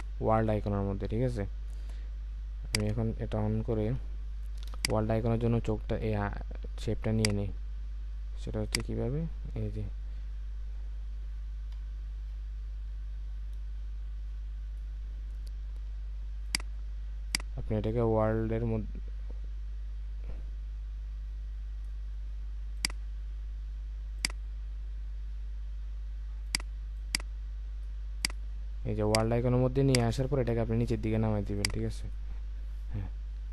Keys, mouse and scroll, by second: 4.1 alt+scroll up 1, 4.7 space, 11.7 space.